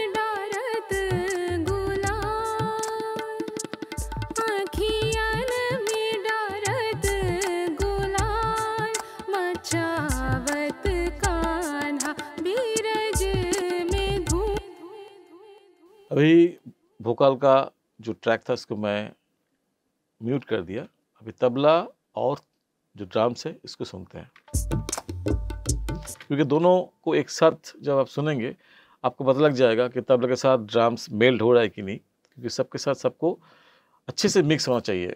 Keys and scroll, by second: 14.5 space, 24.4 space, 26.0 space.